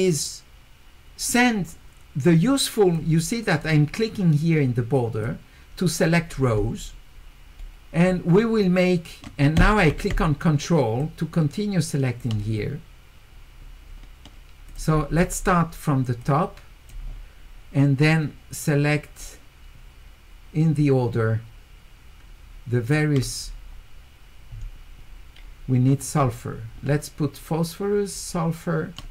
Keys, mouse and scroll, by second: 3.6 click, 5.2 click, 7.6 middle click, 7.6 scroll up 2, 11.0-12.2 ctrl+drag, 15.0 scroll down 2, 16.2 click, 19.2-22.9 ctrl+drag, 25.0 middle click, 25.9 middle click, 27.4-29.0 ctrl+drag.